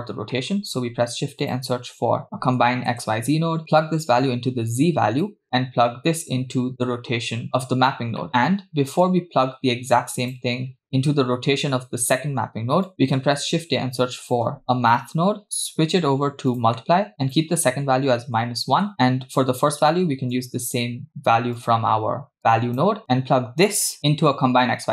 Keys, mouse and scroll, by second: 0.3 shift+middle click, 0.7 shift+a, 4.2-5.3 drag, 5.9-7.8 drag, 8.2 middle click, 10.6 click, 12.9 click, 13.2 shift+a, 15.4-16.8 drag, 15.4 middle click, 17.3-18.8 drag, 20.4-21.1 drag, 21.6 click, 22.4 click, 23.0 click.